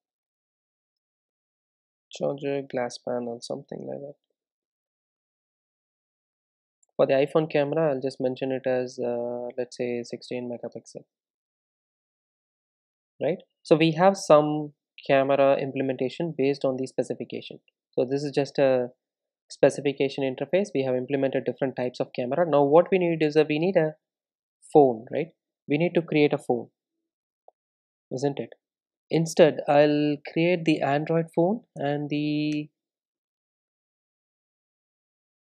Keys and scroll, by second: 5.3 super+e, 10.5 Tab, 13.2 super+s, 18.0 super+e, 22.9 super+e, 25.8 super+n.